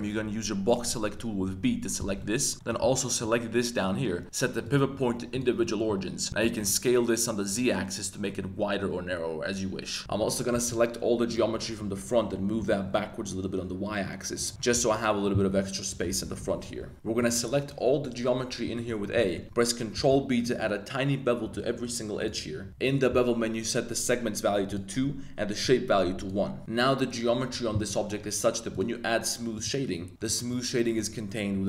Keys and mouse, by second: 2.2 middle click, 2.8 b, 4.7 click, 5.6 middle click, 6.4 s, 6.6 z, 10.0 a, 10.2 space, 10.5 b, 11.5 space, 11.8 click, 12.6 g, 12.8 y, 14.7 z, 16.2 g, 16.4 y, 16.9 a, 17.2 a, 18.7 shift+drag, 19.2 middle click, 19.9 super+b, 22.2 shift+click, 24.6 click, 25.7 click, 27.7 Tab, 27.8 middle click, 28.7-29.6 right drag, 29.6 click, 30.1 middle click, 30.3 shift+middle drag, 30.9 Tab.